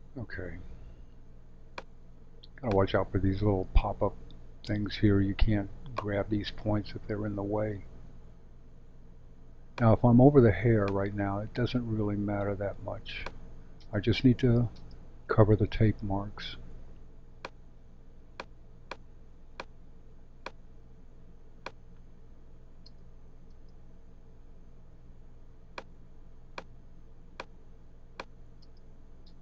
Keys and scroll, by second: 13.8 space, 22.8 space, 28.6 space.